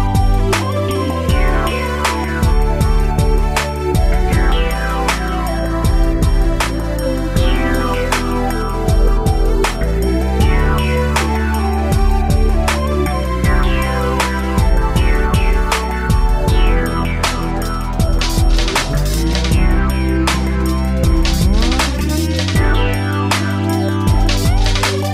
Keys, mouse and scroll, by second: 0.2 ctrl+c, 0.5 ctrl+shift+v, 1.1 middle click, 1.9 scroll down 1, 2.4 middle click, 4.0 click, 5.7 ctrl+c, 5.9 ctrl+shift+v, 6.3 middle click, 7.3 Right, 7.6 Right, 7.9 Right, 9.8 Left, 10.0 Left, 10.5 Right, 10.8 Right, 13.4 middle click, 14.9 click, 15.5 Escape, 16.4 Right, 16.6 Right, 16.9 Right, 18.5 Right, 20.1 middle click, 21.0 middle click, 22.3 Down, 23.2 middle click, 24.6 click.